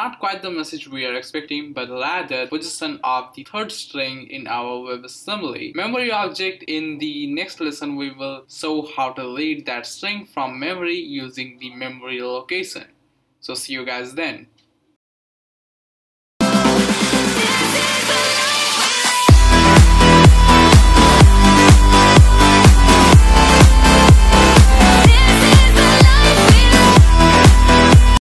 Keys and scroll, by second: 7.0 Return.